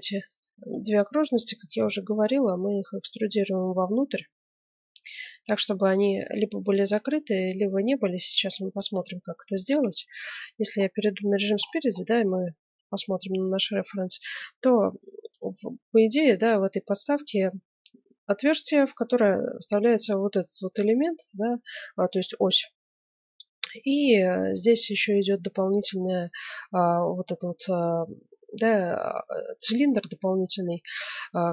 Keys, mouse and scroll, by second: 0.3 right click, 1.3-2.5 right drag, 2.5 middle click, 3.2 right click, 3.7 middle click, 6.0-7.7 middle drag, 7.9-9.8 middle drag, 9.8 KP_1, 10.4-11.7 middle drag, 11.9-14.7 middle drag.